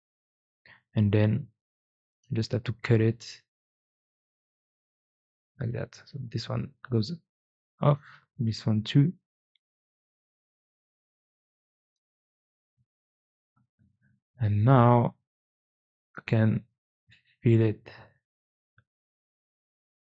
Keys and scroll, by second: 0.5 4, 4.1 c, 6.1 x, 6.8 x, 8.2 x, 15.2 2, 17.3 4, 17.9 4, 18.3 4, 19.9 Escape.